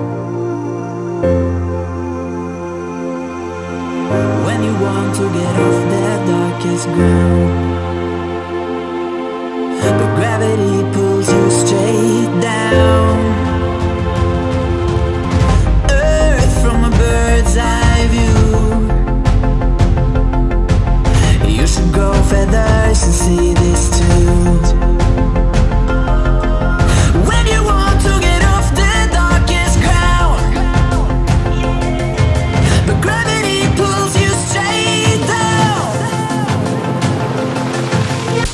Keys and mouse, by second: 0.3 ctrl+-, 0.5 space, 0.7 click, 1.0 space, 2.3 ctrl+=, 2.9 ctrl+-, 4.3 click, 5.8-9.0 shift+drag, 9.0 Right, 9.8-11.6 alt+drag, 11.8 space, 12.0 click, 12.1 space, 12.5-15.4 alt+drag, 19.9-20.4 drag, 21.5-22.0 drag, 23.2 click, 24.0 ctrl+-, 24.7 space, 25.3 click, 25.4 ctrl+=, 25.6 space, 25.8 click, 26.0-26.5 space, 29.0 click, 29.7-32.7 typing, 29.8 click, 30.3 click, 33.8-34.6 typing, 34.3 click, 35.7-36.0 shift+drag.